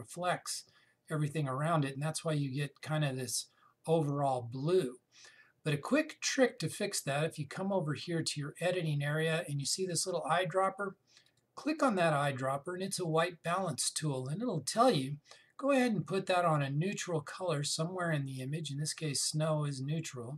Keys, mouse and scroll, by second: 11.9 click, 19.9 click.